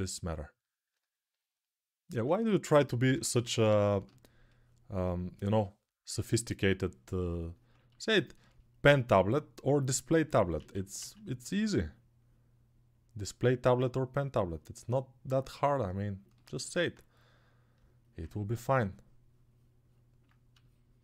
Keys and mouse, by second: 2.1-3.1 typing, 10.3 ctrl+z, 10.7 ctrl+z, 11.3-16.2 ctrl+drag, 16.2-21.0 alt+right drag.